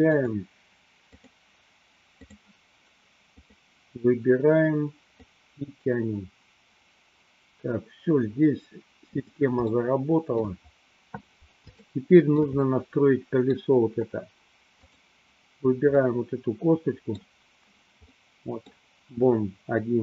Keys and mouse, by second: 1.3-2.5 drag, 3.4 click, 5.2-9.3 drag, 9.8-10.7 shift+middle drag, 12.0-12.6 shift+middle drag, 12.8-13.8 middle drag, 15.1 click, 16.2-17.3 middle drag, 18.3 middle click.